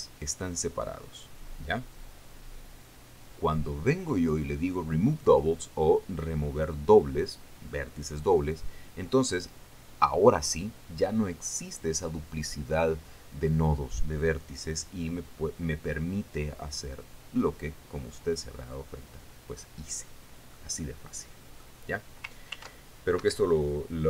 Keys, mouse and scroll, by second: 21.1-22.3 drag, 23.1 ctrl+r, 23.7 Escape.